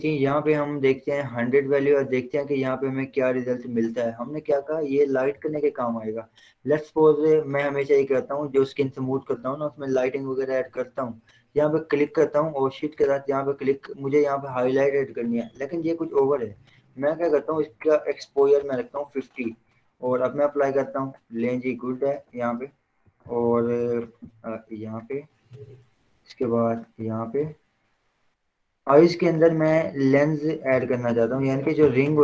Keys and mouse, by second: 4.6 [, 4.9 [, 12.2 click, 16.7 ctrl+z, 17.7 click, 18.8 5, 19.0 Return, 20.5-22.4 drag, 22.4 Return, 23.4-23.9 ], 25.7 click, 27.5 z, 28.6-30.8 drag, 30.6-32.0 typing.